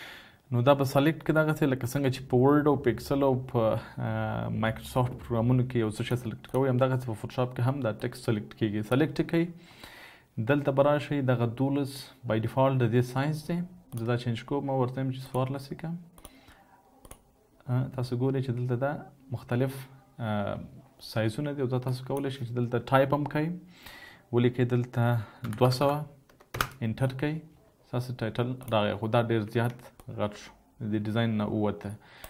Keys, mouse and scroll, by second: 25.6-25.9 typing, 26.7 Return.